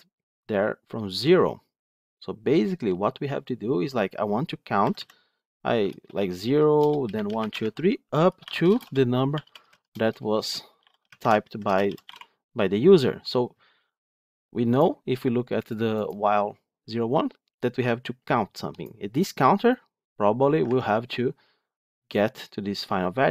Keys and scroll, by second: 20.6 ctrl+Tab.